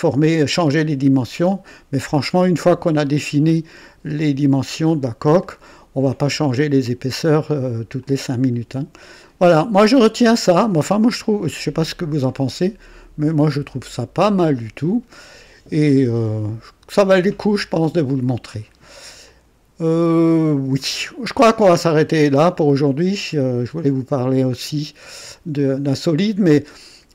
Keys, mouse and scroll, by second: 1.3 click, 5.5-7.8 drag, 8.0-9.1 drag, 9.2-10.5 drag, 10.7 right click, 11.5-15.4 drag, 17.5-19.0 drag, 19.2-23.4 drag.